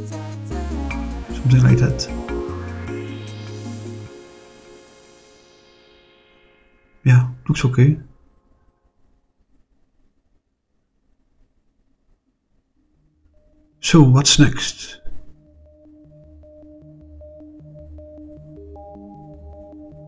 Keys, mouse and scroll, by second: 0.6 click, 1.1-2.3 drag, 4.1 click, 6.6 click, 7.5-11.6 middle drag, 11.6 scroll down 2, 12.3-14.3 middle drag, 14.6-15.4 middle drag, 15.6 scroll down 1, 15.8-18.5 middle drag, 18.8-20.0 middle drag.